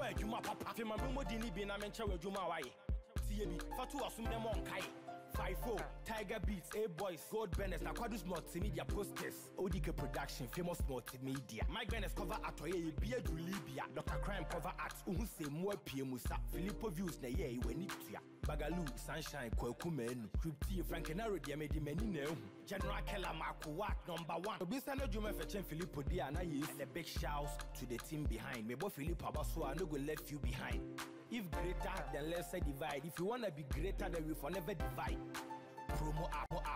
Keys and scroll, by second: 6.6 ctrl+t, 17.2 ctrl+t, 36.3 Return.